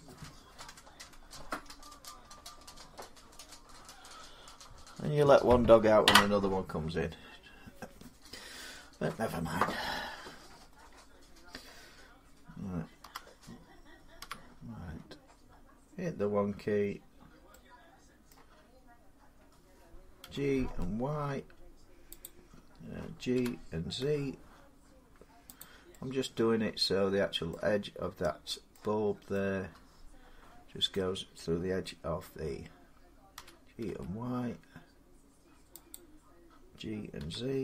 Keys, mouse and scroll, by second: 12.8 7, 14.0 1, 18.1-22.0 middle drag, 20.0-20.5 typing, 22.0-24.7 drag, 23.2-23.8 typing, 25.4 click, 27.3 middle click, 27.7 scroll up 4, 28.6 scroll down 1, 28.9 scroll up 1, 28.9 scroll, 30.7 middle click, 33.2-33.7 typing, 35.7-37.6 drag, 37.0-37.6 typing.